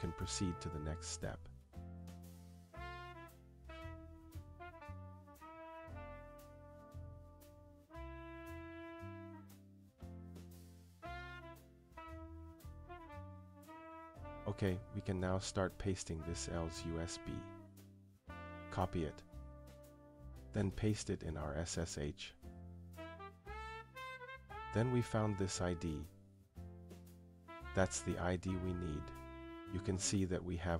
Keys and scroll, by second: 13.2 Return.